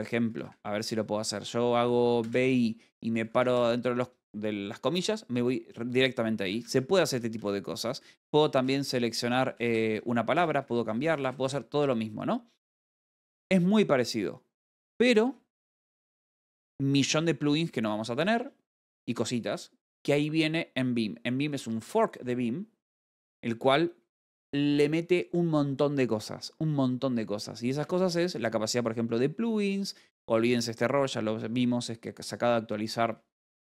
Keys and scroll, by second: 0.0-0.7 typing, 6.7-8.9 typing, 7.1 Escape, 11.5-15.6 typing, 18.0-19.0 typing, 19.3 Return, 28.0-29.0 typing.